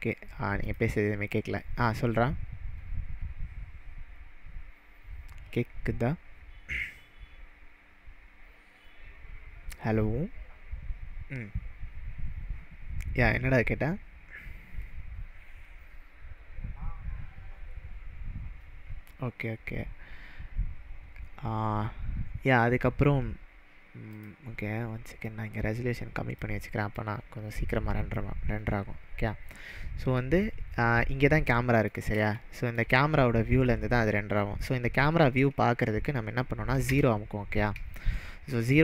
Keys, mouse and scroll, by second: 0.0 click, 0.7 click, 24.2 click, 25.3-26.5 drag, 30.5-32.0 middle drag, 36.9 KP_0.